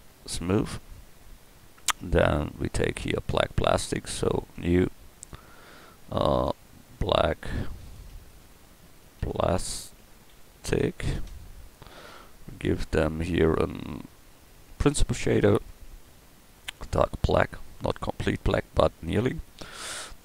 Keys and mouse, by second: 0.4 click.